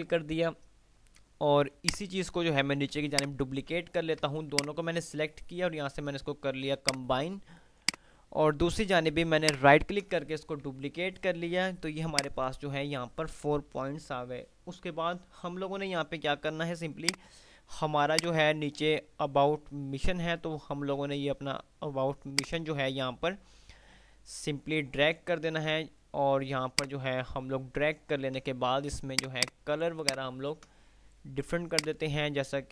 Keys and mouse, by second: 1.8-3.8 alt+drag, 3.3 ctrl+alt+right click, 4.4-5.3 alt+drag, 9.6 ctrl+right click, 10.9 F3, 12.4 click, 17.1-20.8 drag, 26.6-27.8 F2, 29.3 click, 30.1 ctrl+click.